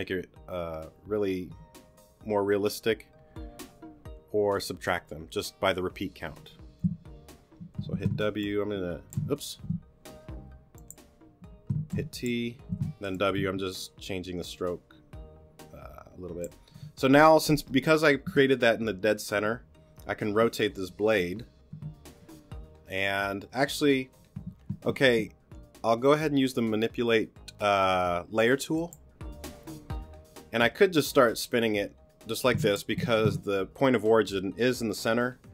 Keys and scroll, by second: 7.9 w, 11.9 t, 12.7 w, 33.1 super+z.